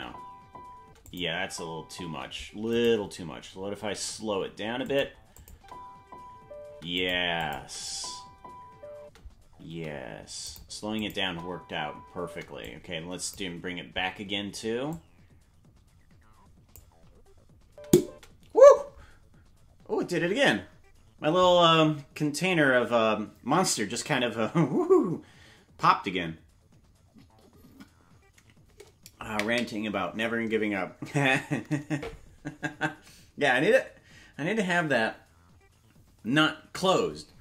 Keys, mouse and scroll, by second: 1.1 click, 1.1 space, 1.3 space, 2.7 right click, 2.7 space, 3.9 g, 5.4 click, 5.5 space, 6.8 space, 7.0 click, 7.4 click, 7.5 space, 9.7 space, 9.7 g, 11.0 click, 11.2 space, 12.6 click, 12.6 space, 14.9 click, 17.6 space.